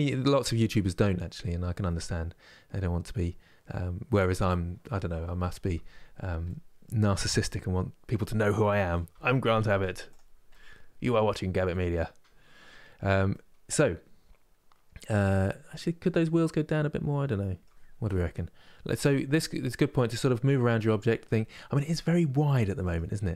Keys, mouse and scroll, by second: 6.1-8.8 middle drag, 8.8 z, 10.2-12.6 middle drag, 12.6-13.0 scroll up 2, 13.0-16.1 middle drag, 18.4-19.0 scroll down 1, 19.0-23.3 middle drag.